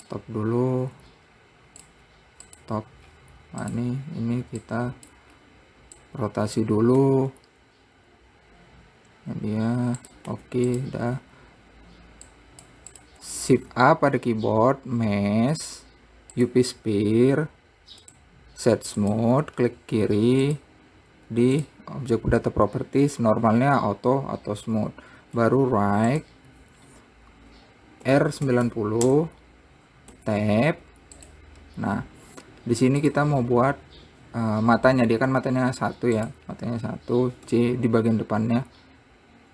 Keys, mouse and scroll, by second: 3.6-4.3 scroll down 2, 4.3 click, 5.2 click, 5.9 scroll up 3, 6.6 click, 7.6 r, 12.9 click, 13.5 click, 14.3 shift+a, 17.5 scroll up 3, 18.6-21.0 right drag, 21.0 click, 22.2 click, 26.0 `, 28.6 r, 30.7 Tab, 31.2 `, 32.5-33.1 scroll up 5, 33.6 click, 34.3-35.9 scroll down 1, 36.8 click, 38.0 c.